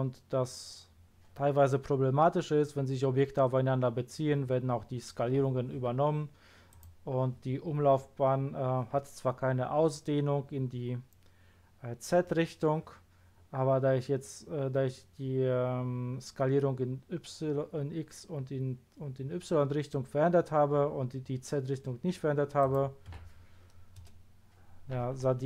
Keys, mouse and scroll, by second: 6.7 click, 22.6 click, 23.1 1, 23.9 Return.